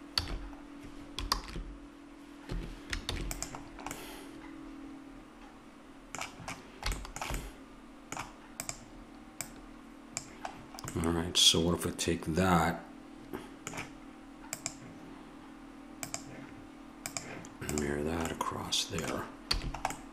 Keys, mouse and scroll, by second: 0.2 a, 1.3 ctrl+a, 3.1 ctrl+s, 8.7-11.2 drag, 12.0 middle click, 14.5-20.1 drag, 19.5 a.